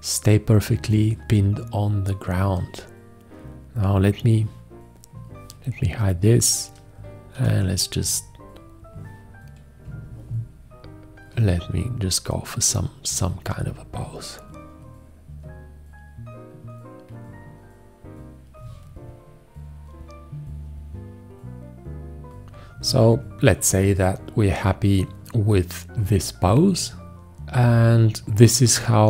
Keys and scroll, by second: 7.4 g.